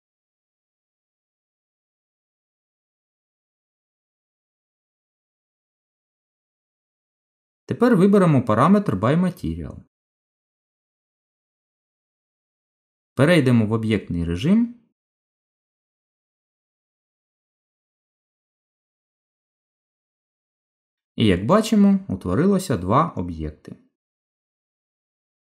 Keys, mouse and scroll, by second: 1.2 click, 2.1 middle click, 7.0 right click, 11.5 middle click, 13.7 Tab, 14.4 middle click, 18.2 click, 19.9 click, 21.2 g, 24.0 middle click.